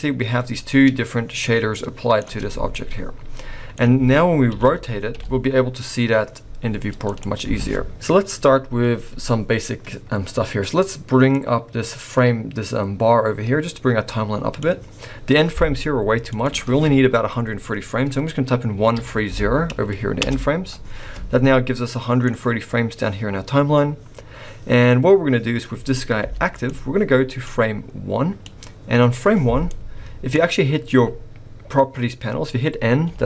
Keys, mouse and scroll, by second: 1.3 scroll up 1, 1.4 middle click, 2.2 Tab, 2.6 scroll down 2, 2.7 middle click, 4.4 r, 11.3 click, 16.3 click, 21.8 middle click, 26.2 g, 27.4 click, 29.6 middle click.